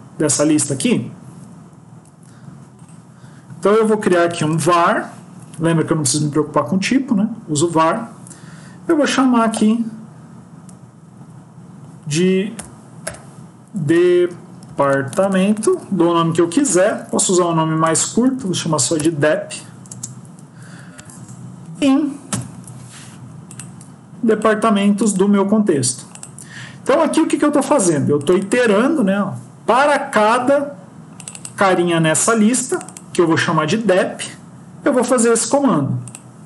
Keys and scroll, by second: 0.6 ctrl+x, 13.7 BackSpace, 16.9 ctrl+shift+Left, 17.3 ctrl+shift+Right, 17.7 ctrl+shift+Left, 18.0 shift+Right, 18.8 BackSpace, 22.2 ctrl+v.